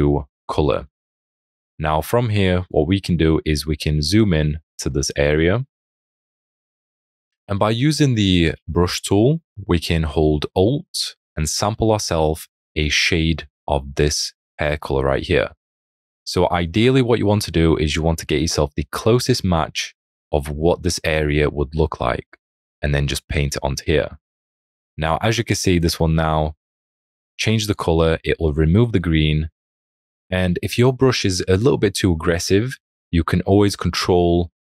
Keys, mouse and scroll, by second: 3.8 alt+scroll, 5.5 alt+scroll, 8.9-9.8 scroll, 11.5 alt+click, 27.6 alt+click.